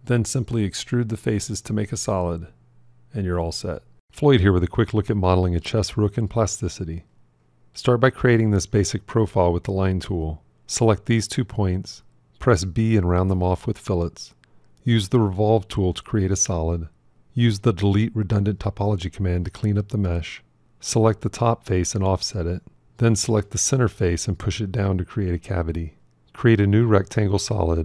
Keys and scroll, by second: 11.7 b.